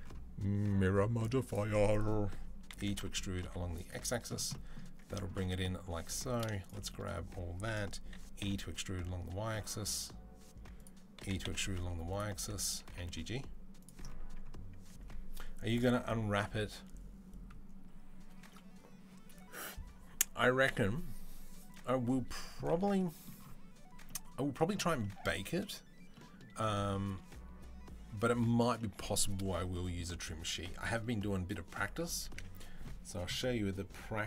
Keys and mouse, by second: 1.3-2.5 drag, 2.5-6.2 middle drag, 2.5 e, 6.2 click, 6.3-34.2 shift+middle drag, 8.0 e, 11.0 e, 12.2 1, 12.4 click, 12.8 g, 32.4 ctrl+s.